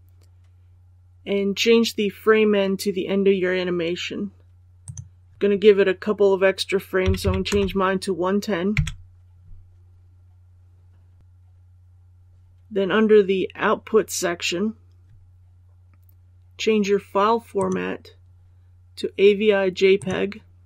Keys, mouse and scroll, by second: 7.0 KP_1, 7.5 KP_0, 17.5 click.